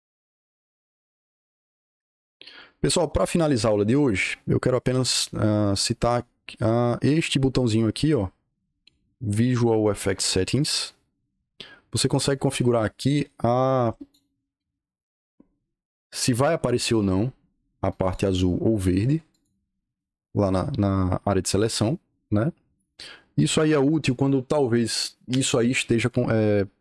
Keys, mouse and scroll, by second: 0.3 Escape, 0.5 Escape, 1.2-2.2 typing, 6.1-6.7 drag, 10.5 click, 12.1-14.0 drag, 17.8 click, 18.6 click, 19.2 click, 19.8 click, 21.5 click, 22.0 click.